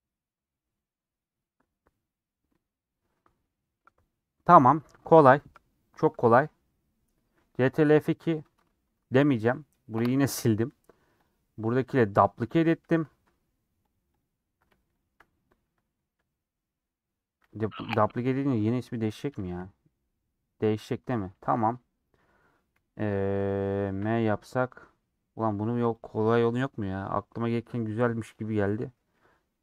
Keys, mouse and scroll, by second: 10.0 Delete, 11.7 click, 12.7 ctrl+click, 14.1 click, 19.4 shift+d, 26.3 m, 28.3 click, 28.9 middle click.